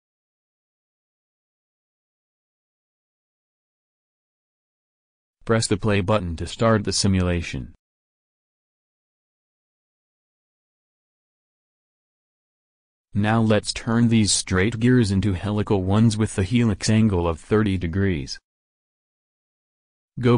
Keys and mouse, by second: 3.1-4.8 drag, 7.0-8.7 drag, 12.2-13.9 drag, 16.4-18.3 middle drag, 19.8 alt+Tab.